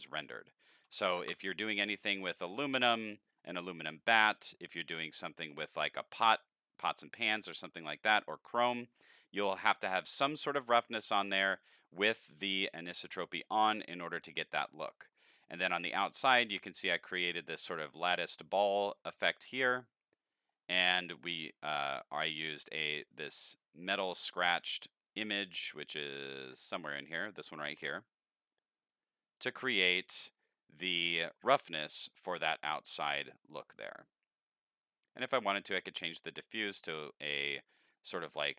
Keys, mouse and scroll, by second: 0.0 click, 1.0 Delete, 1.2 KP_Enter, 19.5 click, 20.5 middle click, 21.1 middle click, 21.5 middle click, 21.9 scroll down 4, 22.2 middle click, 23.1 click, 23.9 click, 25.9 middle click, 26.2 middle click, 26.5 middle click, 26.5 scroll down 1, 27.0 scroll down 2, 28.8 click, 29.6-31.5 middle drag, 35.7 click, 36.8 click.